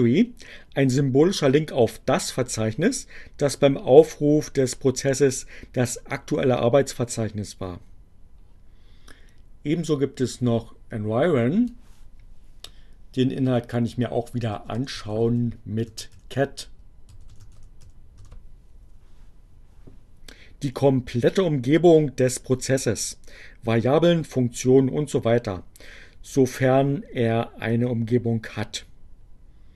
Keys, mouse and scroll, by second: 10.4-11.6 drag, 13.3-14.5 drag, 14.3-18.4 typing.